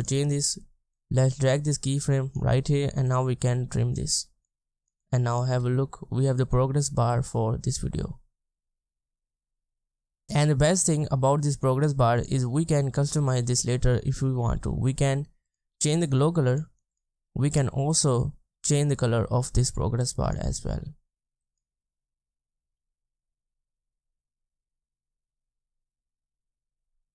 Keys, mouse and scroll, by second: 13.1-16.2 scroll down 1, 17.2-17.9 scroll up 1, 17.9-20.7 scroll down 1, 21.9 space.